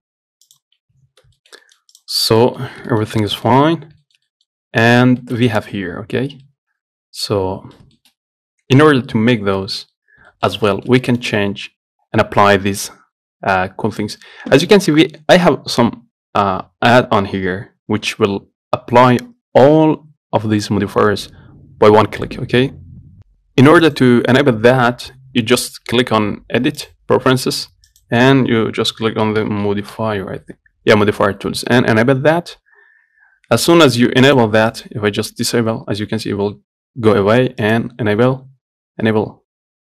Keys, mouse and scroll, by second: 0.1 g, 1.0 scroll down 1, 1.2 Tab, 1.6 shift+middle click, 2.2 click, 2.4 scroll down 1, 2.6 middle click, 2.9 scroll up 1, 3.1-4.8 shift+middle drag, 4.8 scroll up 1, 5.1 middle click, 5.8 click, 6.7-10.2 middle drag, 10.2-10.6 scroll down 1, 10.6 shift+middle click, 10.8 scroll up 1, 11.0-16.7 shift+middle drag, 23.2 shift+middle click, 24.1-26.9 drag.